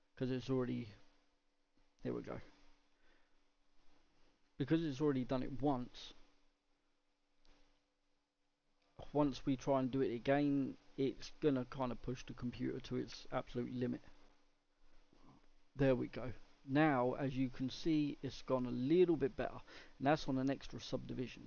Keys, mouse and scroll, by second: 16.7-17.1 middle drag, 17.1-17.7 scroll up 2, 17.7-19.3 middle drag, 19.3-20.0 scroll down 2, 20.0-21.4 middle drag.